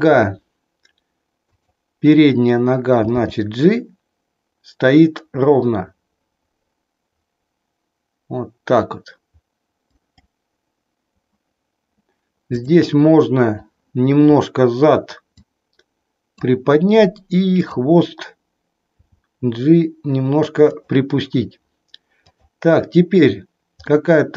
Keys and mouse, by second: 0.0 KP_3, 1.4-2.4 drag, 3.2 g, 10.1 click, 15.2-16.4 drag, 17.5-18.6 drag, 19.1 g, 20.8 click, 22.2 click, 23.8 middle click.